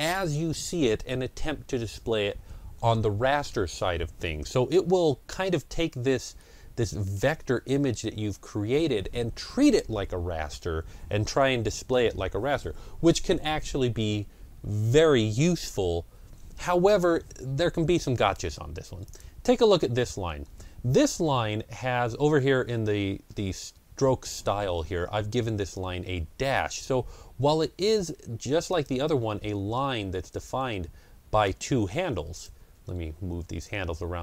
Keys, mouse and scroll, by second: 5.0 ctrl+scroll down 1, 6.2-10.7 middle drag, 18.9 click, 18.9-20.1 middle drag, 18.9 scroll down 1, 19.8 scroll down 1, 30.3-34.2 drag, 30.3-30.6 scroll down 1.